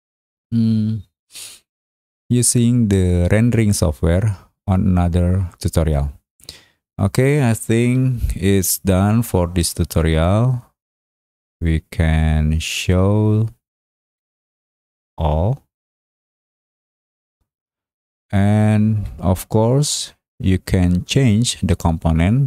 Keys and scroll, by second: 8.4 Escape, 14.0 Escape.